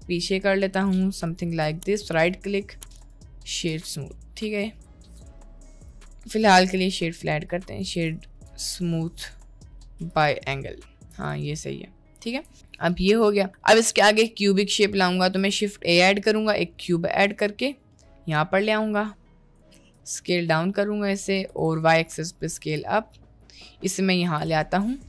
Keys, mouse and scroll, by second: 1.6 Tab, 1.8-2.6 right drag, 3.8 click, 4.4-5.1 right drag, 5.1 middle click, 5.9 click, 6.0-6.6 right drag, 7.0 middle drag, 7.6-8.0 right drag, 8.6-9.2 shift+middle drag, 9.3-10.2 right drag, 10.6-11.2 middle drag, 11.2 Tab, 12.5 Tab, 12.7 middle click, 15.0 click, 15.4 shift+a, 17.4 g, 20.0 s, 21.4 s, 22.7 g, 24.6-25.0 middle drag.